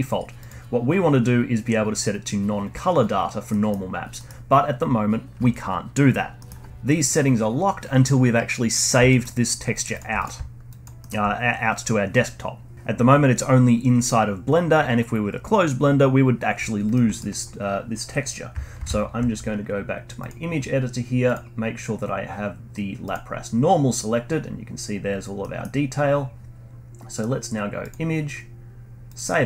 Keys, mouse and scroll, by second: 0.4-3.4 drag, 3.5-6.7 middle drag, 8.7-9.0 scroll down 1, 9.0 middle drag, 9.3 click, 9.7 alt+middle click, 9.9 alt+drag, 10.6 alt+click, 11.0-12.7 alt+middle drag, 16.9-18.7 middle drag, 18.7 ctrl+alt+s, 21.2-23.7 drag, 23.7-24.4 scroll down 6, 24.4 scroll up 1, 24.5-25.0 scroll down 1, 25.0-25.4 scroll down 2, 25.4 middle click, 26.0-27.8 scroll up 1, 27.8-29.4 drag.